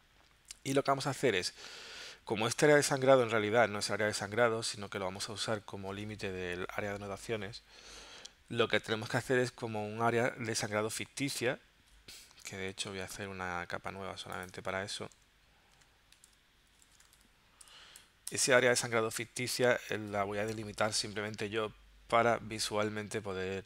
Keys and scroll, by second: 15.5-17.7 typing, 18.3 Return.